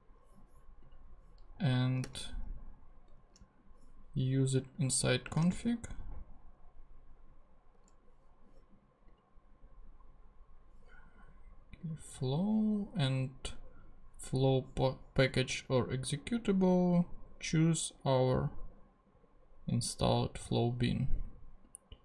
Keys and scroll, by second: 2.0 super+,, 4.9-6.0 typing.